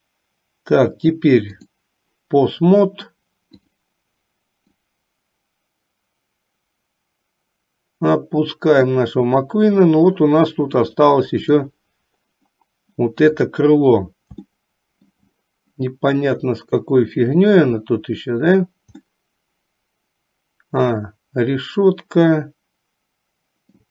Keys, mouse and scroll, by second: 4.8-9.1 drag, 11.0 click, 13.4 click, 14.6 shift+middle click, 19.2-23.9 middle drag.